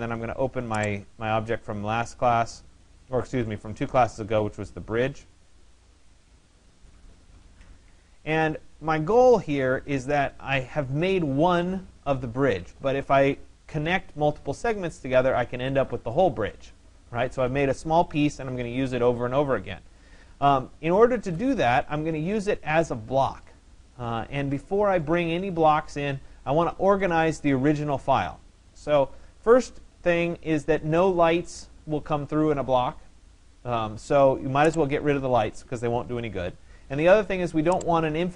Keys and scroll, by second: 35.6 Delete.